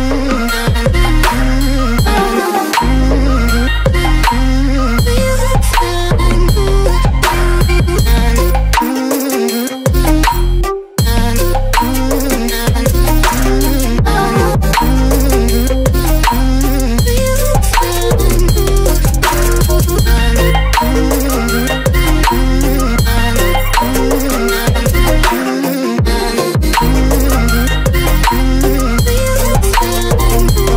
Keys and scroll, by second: 1.4 Return, 8.9 space, 13.6 space.